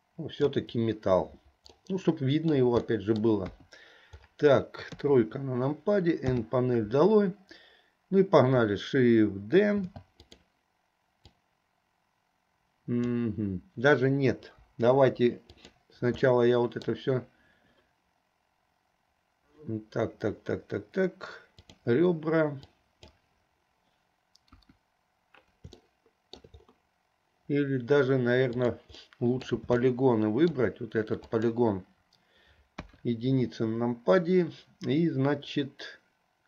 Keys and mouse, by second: 1.9 middle click, 3.1 middle click, 3.4 click, 3.4 right click, 3.6 KP_2, 5.0 KP_3, 6.3 n, 9.9 shift+d, 11.5-13.4 drag, 14.7 Delete, 16.3 middle click, 21.6 click, 22.8 click, 24.6 KP_1, 25.9 shift+middle click, 28.8 click, 29.3 middle click, 30.0 shift+middle click, 31.3 click, 32.9 KP_1.